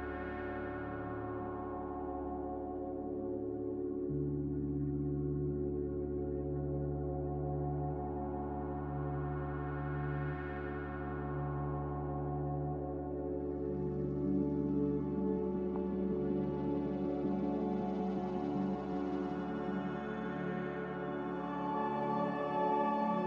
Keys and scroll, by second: 18.2 b.